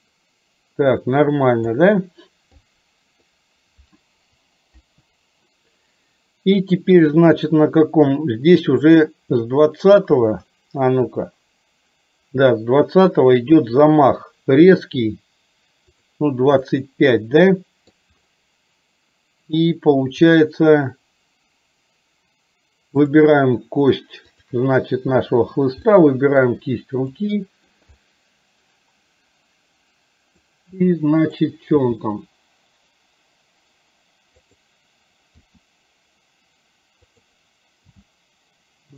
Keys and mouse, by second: 2.8 click, 4.8 Delete, 11.0 KP_1, 16.0 click, 16.8-18.0 middle drag, 23.2 click, 24.4 shift+click, 26.1 middle click, 27.2 middle click, 28.0-30.5 middle drag, 30.8 middle click, 31.8 g, 35.4 r, 37.9 g.